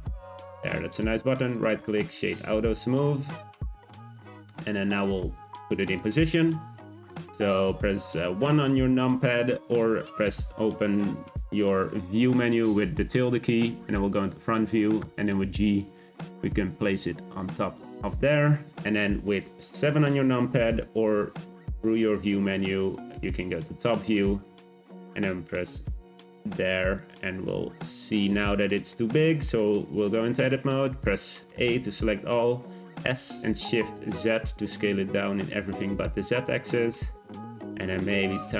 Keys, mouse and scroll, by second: 0.0 Tab, 0.2-0.5 scroll down 2, 0.5 Tab, 0.9-1.8 right drag, 1.8 click, 2.1-4.0 shift+middle drag, 4.0-4.7 scroll down 2, 4.7 click, 5.6-8.6 shift+middle drag, 15.0 g, 18.9-20.9 scroll up 2, 24.9 g, 27.4 Tab, 28.5-29.8 shift+middle drag, 29.8-30.1 scroll down 2, 30.1-31.5 shift+middle drag, 31.5 a, 32.9 s, 36.8-37.9 middle drag, 37.9 s.